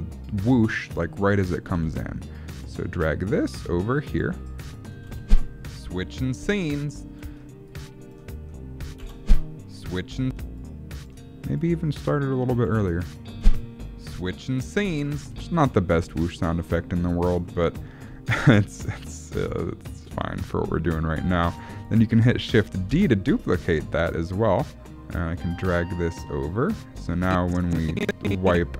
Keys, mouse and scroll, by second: 1.4 click, 1.7 g, 5.1 space, 7.2 space, 7.7 click, 9.0 space, 10.2 space, 10.6 click, 11.6 click, 14.6 space, 15.4 space, 15.7 middle click, 15.9-16.4 scroll down 3, 16.4 scroll up 1, 16.7 middle click, 17.0 scroll up 1, 17.3 middle click, 17.7-18.1 scroll down 1, 18.1-19.8 scroll up 1, 21.8 click, 22.9 shift+d, 27.2 click.